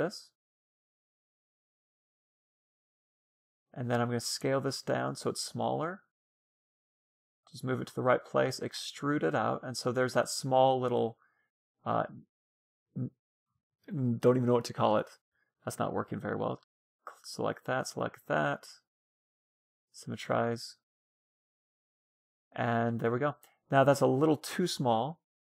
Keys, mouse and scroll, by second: 2.0 shift+d, 3.9 s, 6.6-8.5 drag, 7.9 e, 9.7-11.7 middle drag, 10.7 a, 11.1 a, 11.5 w, 14.6 ctrl+z, 15.1-17.2 middle drag, 15.7 a, 16.4 l, 17.2 l, 18.0 w, 19.4-23.9 middle drag, 19.9 Tab.